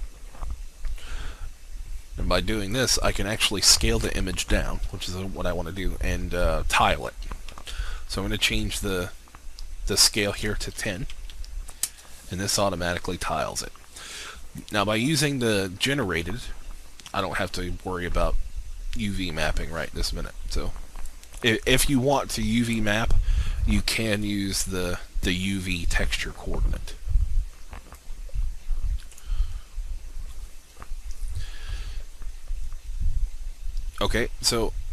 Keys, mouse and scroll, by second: 7.6 typing, 8.1 Tab, 10.3-11.3 typing, 10.9 Tab, 11.8 Return, 14.7-22.5 drag, 24.3-28.1 scroll up 1, 28.1-29.5 drag, 29.7-30.6 scroll down 1, 30.6-31.5 scroll up 1, 32.2-33.1 scroll down 1.